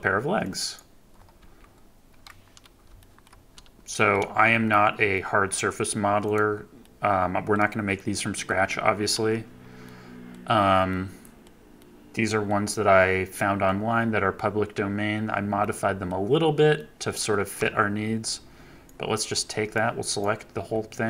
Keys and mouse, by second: 0.4 click, 1.3 KP_3, 2.9 shift+middle click, 3.9 shift+middle click, 4.4 KP_Decimal, 5.1-5.4 drag, 6.2-7.4 drag, 7.9-8.4 middle drag, 9.8-10.3 middle drag, 10.8-11.3 middle drag, 11.7-12.4 middle drag, 13.2-13.6 middle drag, 15.5-16.0 drag, 16.7-17.1 drag, 17.5 KP_1, 18.3-18.8 drag, 19.7 click, 20.4 KP_3.